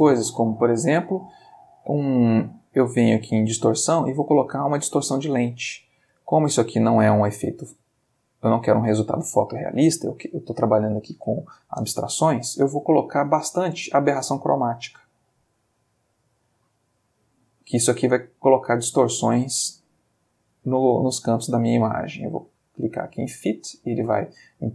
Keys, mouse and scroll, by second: 5.3 click, 6.1 click, 6.4 middle click, 7.4 ctrl+middle click, 8.1 ctrl+click, 13.0-15.0 drag, 15.6 click, 15.9 click, 23.1 click.